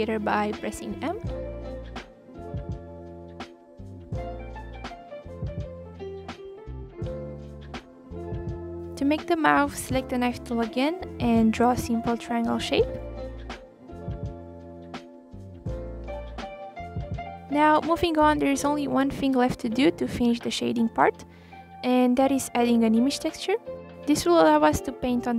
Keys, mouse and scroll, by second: 0.0-0.9 scroll up 6, 0.9 click, 1.3 click, 1.8 m, 2.5 click, 3.0 click, 3.2 m, 4.1 click, 5.5 click, 6.2 click, 6.9 scroll down 1, 7.1 middle click, 7.9 scroll down 1, 8.1-9.5 middle drag, 9.5-11.0 scroll up 9, 11.7 click, 12.6-13.1 scroll up 2, 13.1-18.4 drag, 18.7-19.1 scroll down 1, 19.1 click, 19.3-20.3 scroll up 4, 20.3 click, 20.9 click, 22.1-22.8 scroll up 3, 22.8 click, 23.2-23.7 scroll down 2, 23.7 shift+a.